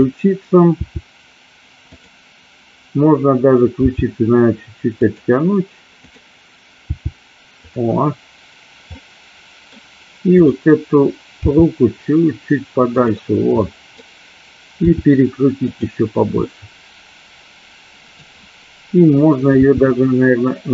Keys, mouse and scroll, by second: 0.0 click, 0.9 r, 4.0 g, 5.1 click, 6.9 g, 9.0 middle click, 10.4 click, 11.6 g, 13.0 click, 13.7 scroll up 1, 13.8 middle click, 15.0 r, 16.5-18.2 middle drag, 19.6 r.